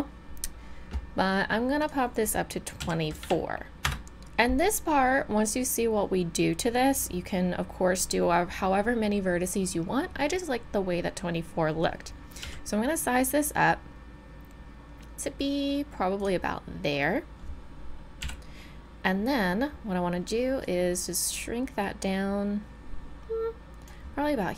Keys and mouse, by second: 12.4 s, 18.2 KP_1, 20.0-20.6 middle drag, 20.6-21.6 drag, 22.5 click.